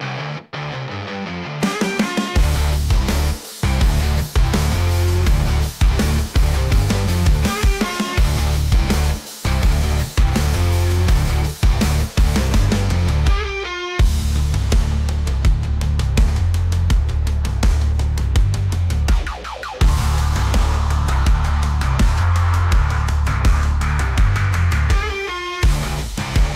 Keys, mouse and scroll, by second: 0.2 click, 1.2 click, 1.7 click, 2.1 `, 2.9-3.2 scroll up 1, 3.2 shift+middle click, 3.9 click, 4.6 click, 5.3 click, 5.8-6.4 scroll down 2, 6.4 click, 6.8-7.5 scroll up 2, 7.5 r, 8.3 shift+middle click, 8.7 r, 10.5 ctrl+z, 11.8 alt+r, 13.3 r, 16.6 g, 19.3 g, 20.8 g, 25.7-26.2 shift+middle drag, 26.2 s.